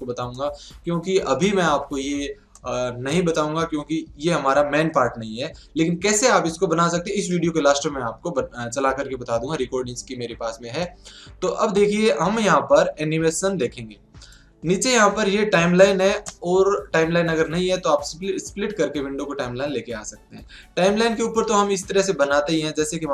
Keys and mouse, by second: 2.0-4.5 middle drag, 5.0-8.4 middle drag, 10.8-13.4 middle drag, 14.3-16.0 drag, 20.8-22.7 drag.